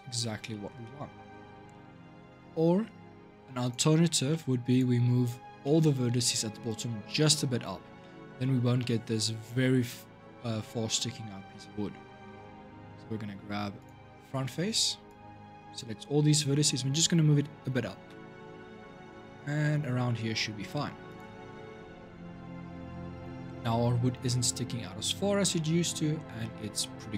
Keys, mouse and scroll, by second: 0.3-1.3 shift+middle drag, 1.3 shift+scroll up 2, 1.5-2.0 shift+middle drag, 2.0-3.4 scroll up 3, 3.4 click, 4.1 shift+middle click, 4.5 click, 4.7 Tab, 5.4-6.4 shift+middle drag, 6.4-6.9 drag, 6.9-11.6 shift+middle drag, 12.0-13.6 middle drag, 13.6 click, 14.8 click, 15.8 scroll up 2, 17.8 g, 21.4 Tab, 21.6-22.9 scroll down 5, 22.9-23.3 drag, 23.3 scroll up 3, 23.5-24.0 middle drag, 24.0-24.5 scroll down 1, 24.5-25.3 scroll up 2, 25.3-26.6 middle drag, 26.6-27.1 scroll down 1.